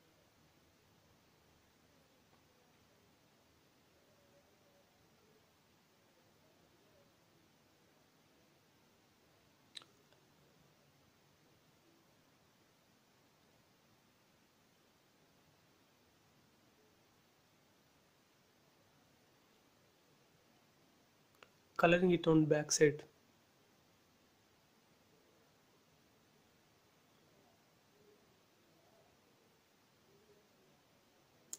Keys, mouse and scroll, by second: 0.6 scroll up 1, 0.8 shift+middle click, 1.2 scroll up 1, 2.2 b, 2.5-3.1 scroll up 1, 3.1 click, 3.5 space, 3.7 scroll down 1, 5.8 click, 6.4 scroll up 1, 6.7 shift+middle click, 7.3 scroll up 1, 7.6-9.5 shift+middle drag, 9.5 click, 13.4 space, 13.7 middle click, 14.7 click, 15.2 middle click, 16.1 middle click, 17.2 shift+middle click, 17.9 scroll up 1, 18.2 middle click, 18.3 middle click, 18.8 shift+scroll up 1, 19.6-19.9 scroll up 1, 20.7 click, 21.7 scroll up 1, 22.0 b, 22.5 click, 24.1 space, 24.2 scroll down 1, 26.8 click, 27.4 middle click, 28.5 scroll up 1, 30.0 scroll up 1, 31.4 click.